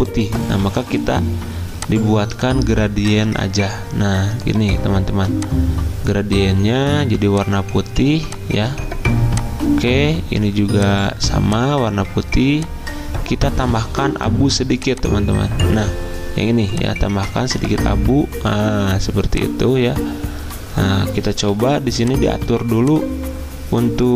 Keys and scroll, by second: 21.5 g, 22.5 g.